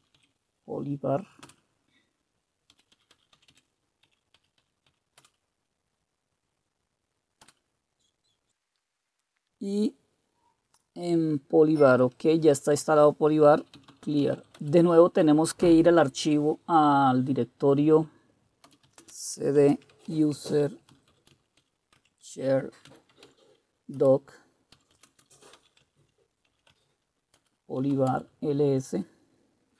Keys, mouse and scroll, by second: 0.0-1.4 typing, 2.5-5.4 typing, 7.4 typing, 13.6-14.8 typing, 18.6-28.4 typing.